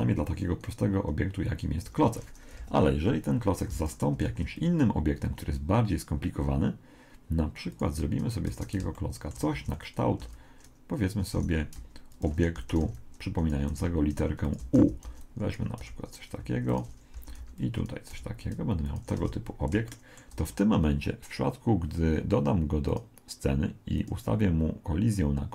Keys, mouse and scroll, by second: 1.9 Escape, 2.6 KP_1, 3.7 x, 4.3 shift+a, 8.5 Tab, 9.0-10.8 middle drag, 9.5 a, 10.2 b, 11.4 e, 12.6 a, 12.8 b, 13.7 e, 14.8 a, 15.1 b, 15.8 e, 17.2 a, 17.4 b, 18.1 e, 19.2 Tab, 19.5-21.6 middle drag, 22.9-25.5 drag.